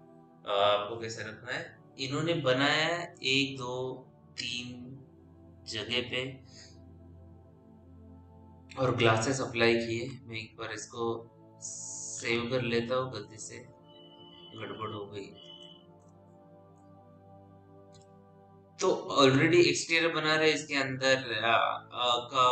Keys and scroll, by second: 12.6 ctrl+s, 13.4 p.